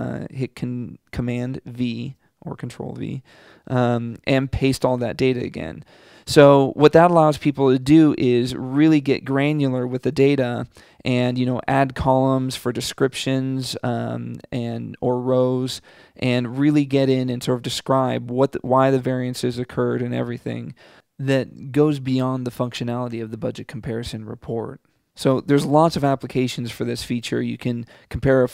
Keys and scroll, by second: 1.5 super+v.